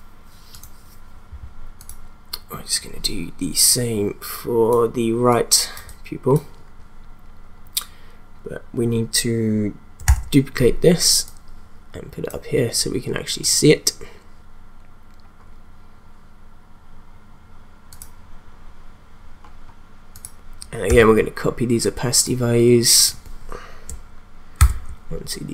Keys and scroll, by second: 10.1 ctrl+d, 21.0 t, 24.6 ctrl+c.